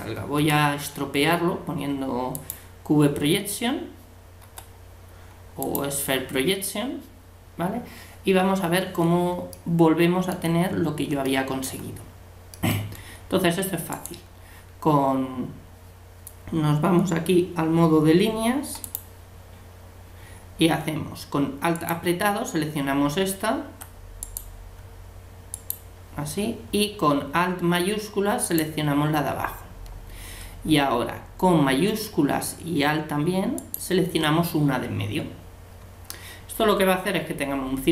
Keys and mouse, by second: 0.4 u, 3.6-5.7 drag, 4.4 u, 9.5-13.9 middle drag, 13.9-15.7 right drag, 18.8-21.8 drag, 18.8-20.4 middle drag, 21.8-23.5 right drag, 24.2-27.5 right drag, 28.4-30.4 right drag, 33.6-35.5 right drag.